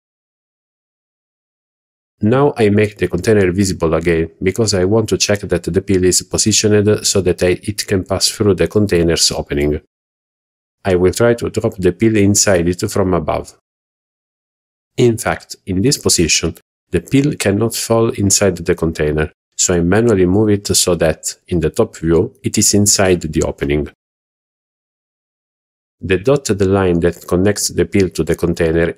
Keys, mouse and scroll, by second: 2.2 alt+h, 3.0 scroll down 2, 5.8 KP_7, 7.0-7.5 scroll up 2, 8.0 click, 14.1 g, 16.4 click, 17.3-17.8 middle drag, 18.0 scroll down 1, 18.5 shift+middle drag, 18.9-19.3 middle drag, 20.3 g, 20.3 z, 22.5 click, 24.4-24.7 scroll up 2, 25.1-25.4 shift+middle drag, 25.6 scroll up 1.